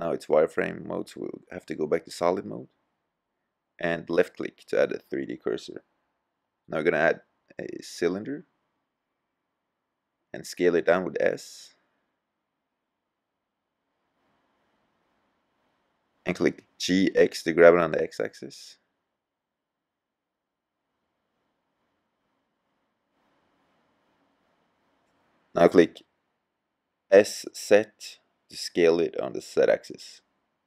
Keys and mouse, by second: 0.1-0.5 middle drag, 2.3-2.9 middle drag, 3.8-5.2 drag, 5.4 click, 5.5 middle click, 7.7-8.8 middle drag, 10.6 middle click, 12.7 s, 15.0-15.8 drag, 15.8-16.7 middle drag, 20.4 g, 27.0-28.6 middle drag, 30.4 s.